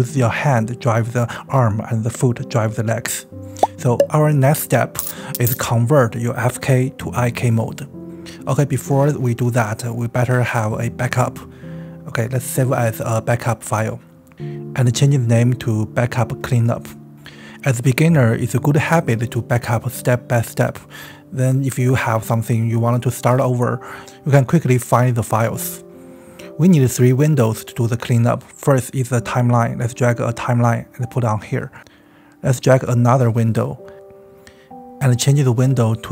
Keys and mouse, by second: 0.3-3.3 middle drag, 10.4 click, 11.1 ctrl+s, 12.1 ctrl+shift+s, 25.2 click, 25.5 click, 25.8 space, 26.6 space, 26.7-27.4 drag, 28.3-29.6 drag, 30.1 click, 34.7 click, 35.8-36.1 drag.